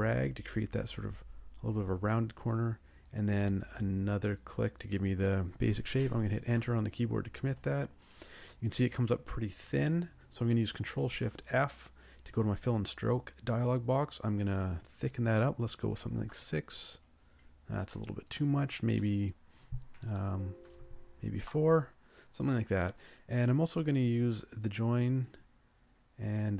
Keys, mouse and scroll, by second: 6.5 Return, 11.3 ctrl+shift+f, 15.9 6, 16.2 Return, 19.0 8, 20.1 BackSpace, 20.7 4, 21.4 Return.